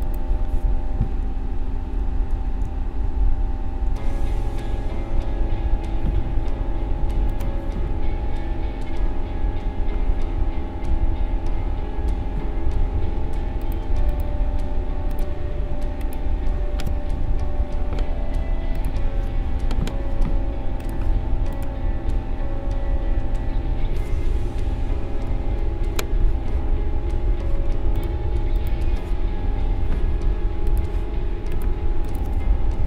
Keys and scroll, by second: 1.2 Right, 1.9 Up, 2.3 Right, 2.6 Down, 3.9 Left, 17.2 i, 24.7 ctrl+-, 25.2 ctrl+0.